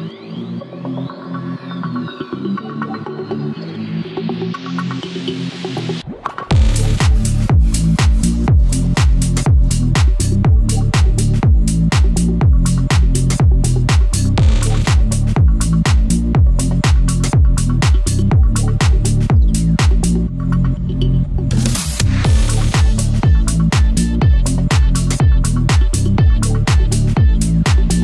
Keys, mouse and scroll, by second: 0.6 click, 1.8 scroll down 1, 5.1 scroll up 1, 6.1 click, 8.2-8.7 scroll up 1, 10.3-16.9 drag, 21.4 ctrl+z, 22.6 click, 26.4 scroll down 1, 27.9-28.0 drag.